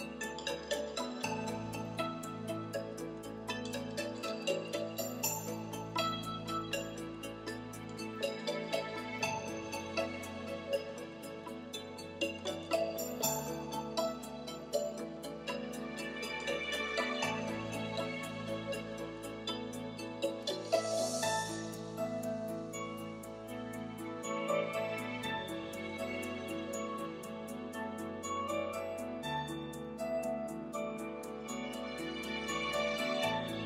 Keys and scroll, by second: 24.9 |.